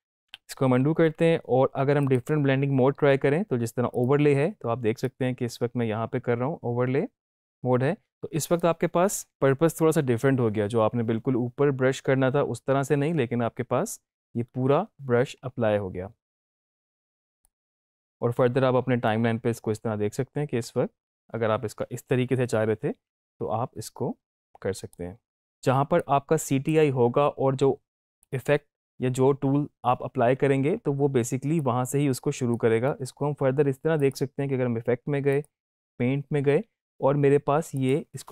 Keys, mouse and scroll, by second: 0.1 ctrl+z, 1.9-8.7 drag, 15.3 space, 17.5-26.0 drag, 24.7 right click, 25.3-28.2 drag, 31.5-32.8 drag, 37.8 click.